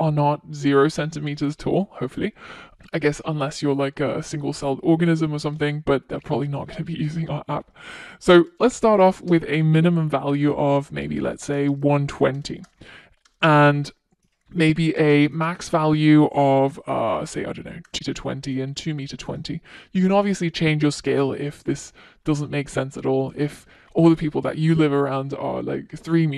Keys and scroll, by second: 6.7 Return, 13.0 Return.